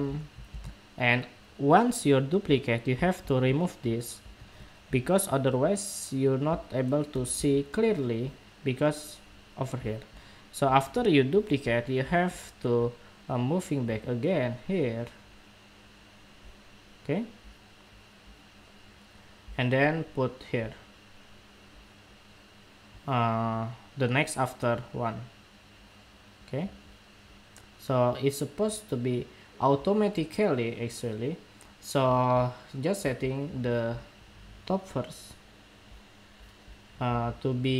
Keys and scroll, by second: 0.2 super+v.